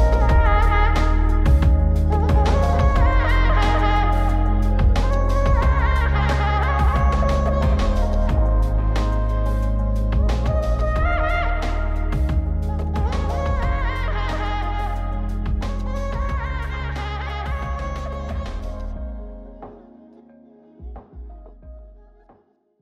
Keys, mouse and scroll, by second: 0.4 middle click, 1.1 click, 2.3 click, 4.6 click, 6.0 click, 8.6 click, 9.6 Tab, 10.6 click, 11.7 shift+g, 14.7 ctrl+i, 15.2 x, 17.3-18.3 middle drag.